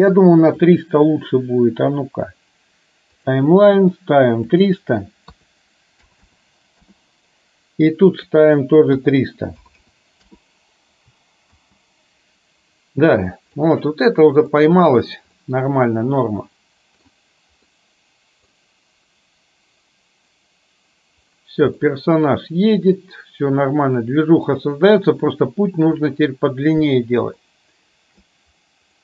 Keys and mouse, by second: 0.8-3.3 drag, 4.6-7.0 drag, 6.3 KP_0, 8.4-10.4 drag, 9.9 KP_0, 11.6 space, 13.7 middle click, 15.5-17.3 middle drag, 17.8-18.6 middle drag, 21.9-24.6 middle drag, 27.5-28.4 shift+middle drag.